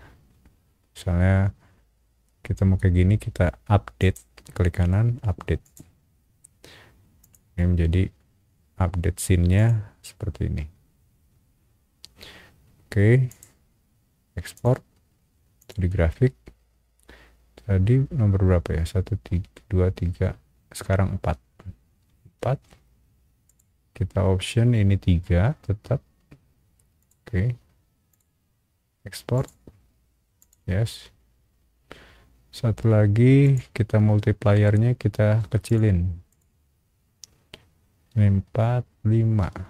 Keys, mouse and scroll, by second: 4.0 right click, 5.6 click, 7.2 click, 9.5 click, 13.3 click, 14.5 click, 15.6 click, 22.3 r, 23.4 click, 27.0 click, 28.1 click, 29.3 click, 30.4 click, 33.4 click, 35.6 click, 36.3 click, 39.4 5.